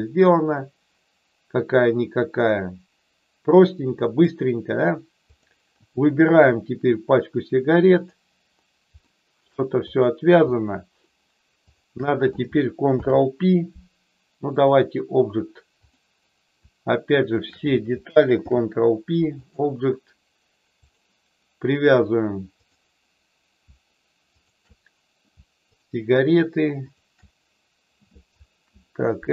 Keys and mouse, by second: 0.0-4.4 drag, 5.2 click, 6.6-8.1 drag, 9.1 shift+middle click, 9.7 click, 11.6 shift+click, 12.8 ctrl+p, 15.8 click, 17.3 shift+click, 18.3 ctrl+p, 20.9 click, 22.5 click, 24.3 shift+click, 26.9 shift+click.